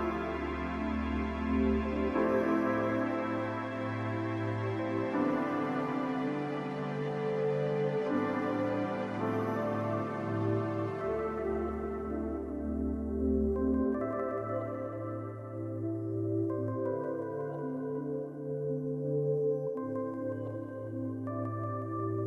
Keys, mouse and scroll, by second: 17.7 s, 18.6 scroll, 19.1-19.5 ctrl+scroll down 1, 20.6 ctrl+scroll down 1, 20.9 ctrl+x.